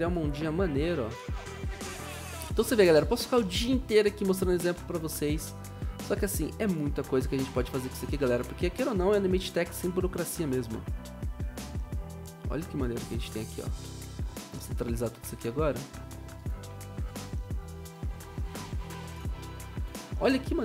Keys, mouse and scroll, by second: 1.3 ctrl+d, 2.9 ctrl+d, 8.7 ctrl+d, 15.5 ctrl+z.